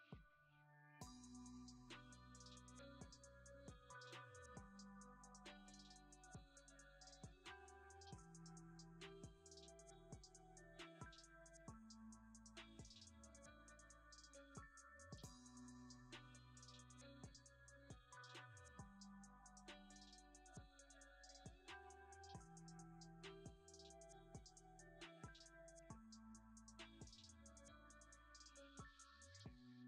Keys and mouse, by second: 0.1 g, 0.3 click, 10.3 click, 10.6 click, 18.6-19.5 drag, 19.9 click, 20.9 click, 25.4 click, 26.7 shift+middle click, 29.0 click.